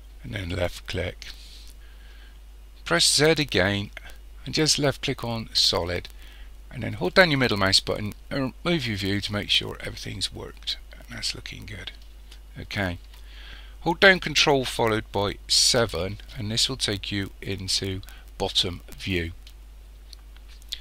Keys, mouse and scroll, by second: 0.5 click, 3.0 z, 7.1-15.6 middle drag, 15.6 ctrl+KP_7, 18.8-20.8 middle drag.